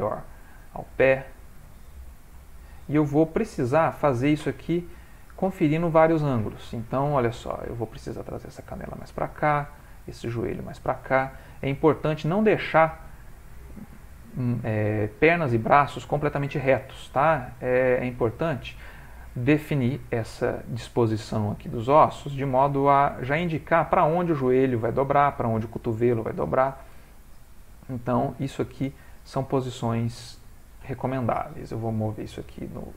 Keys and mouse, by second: 0.0 click, 1.1 click, 2.1 g, 5.0 click, 6.3 shift+middle click, 7.3 click, 7.8 g, 9.6 click, 9.8 g, 12.7 click, 14.0 g, 15.4 click, 16.3 g, 17.6 click, 18.1 g, 26.4 shift+middle click, 26.5 shift+middle click, 26.5 shift+middle click, 27.0 ctrl+middle click, 27.3 ctrl+middle click, 27.7 click, 28.2 g, 29.5 click, 30.3 g.